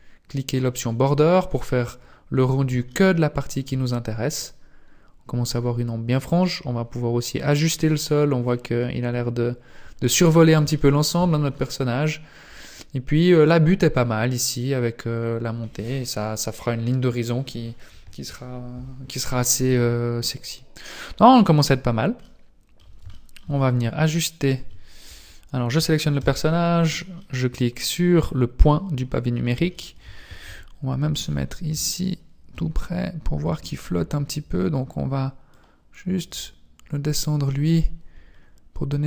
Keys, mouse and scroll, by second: 1.8 scroll up 2, 2.7 shift+middle click, 6.4 scroll up 1, 10.8 shift+middle click, 11.4-12.9 scroll down 5, 12.9-13.2 scroll up 2, 13.5-13.9 scroll down 1, 22.2 middle click, 23.1 shift+middle click, 23.5 scroll up 5, 24.4 right click, 26.2 KP_Decimal, 27.2 middle click, 29.0-29.4 scroll up 3, 29.7 shift+middle click, 30.0-30.4 shift+scroll up 1, 30.4 KP_1, 31.5-32.0 scroll up 2, 32.0 shift+middle click, 32.8 scroll up 3, 35.5 click, 38.3-38.7 scroll up 5.